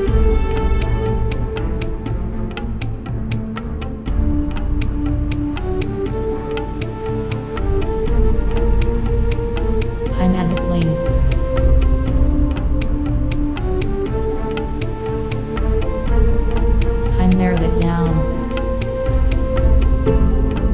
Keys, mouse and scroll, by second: 0.8-3.3 middle drag, 0.8 z, 1.3 Tab, 4.2-4.9 middle drag, 6.8 Tab, 8.0 KP_1, 8.3 z, 9.1 Tab, 9.8 shift+a, 12.6 KP_3, 12.8 Tab, 13.3 r, 14.4 KP_1, 16.3-18.2 right drag, 17.0 g, 18.6 click, 19.3-20.7 right drag, 19.5 g, 20.6 click.